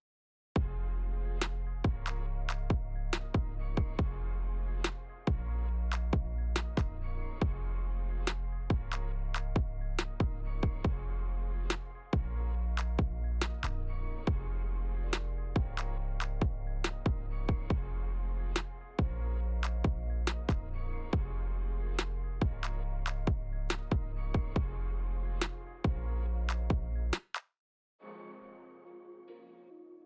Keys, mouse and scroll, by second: 25.8 click.